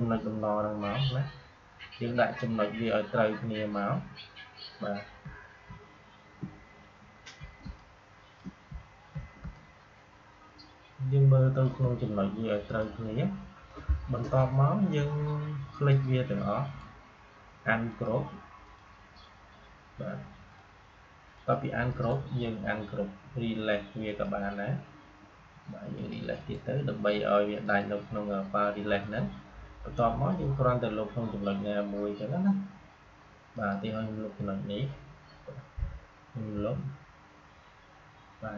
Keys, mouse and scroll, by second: 3.6-5.1 scroll down 2, 5.6 space, 6.9 space, 7.1 alt+scroll down 1, 7.5 space, 7.7 click, 8.0 space, 8.8 alt+scroll up 1, 9.3 space, 12.6-16.6 drag, 16.6 right click, 17.8 click, 21.8 right click, 24.0 click, 26.3 right click, 27.5 click, 33.4 click, 36.5 Delete.